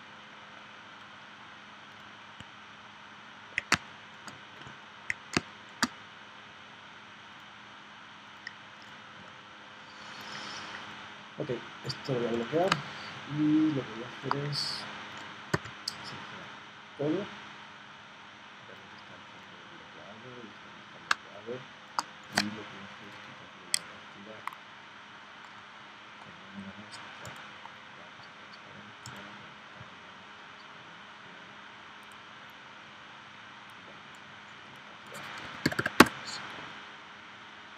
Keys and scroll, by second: 3.7 space, 5.4 space, 12.8 space, 15.5 v, 21.1 space, 35.4 1, 36.0 Return.